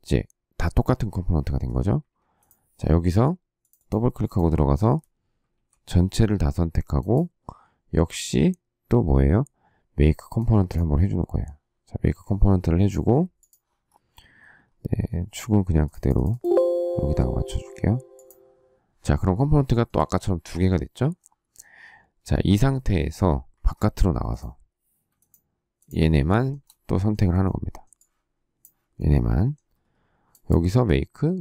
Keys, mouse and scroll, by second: 1.9 Escape, 5.4 ctrl+a, 19.6 shift+middle click, 23.4 Escape, 25.1 shift+click, 25.7 shift+click, 26.0 shift+scroll, 26.2 shift+middle click.